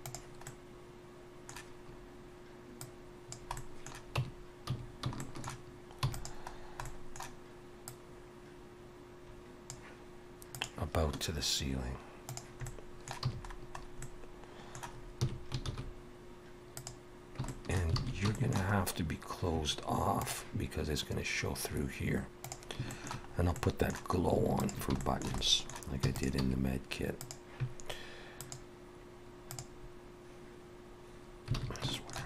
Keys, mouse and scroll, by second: 0.5 middle click, 2.0 scroll down 1, 2.8 click, 3.6 middle click, 4.2 Tab, 4.5 a, 5.2 shift+middle click, 6.0 e, 6.5-7.0 scroll down 3, 6.8 middle click, 7.9 click, 12.7 middle click, 13.3 a, 13.7 scroll up 2, 14.0 middle click, 15.2 s, 17.5 shift+middle click, 18.0 alt+a, 18.3 shift+middle click, 18.8 scroll up 1, 22.9 shift+middle click, 23.3 scroll up 1, 23.6 middle click, 24.6 alt+shift+click, 25.0 shift+middle click, 25.4 middle click, 26.0 e, 26.4 s, 28.4 click, 31.6 alt+a, 31.9 shift+middle click.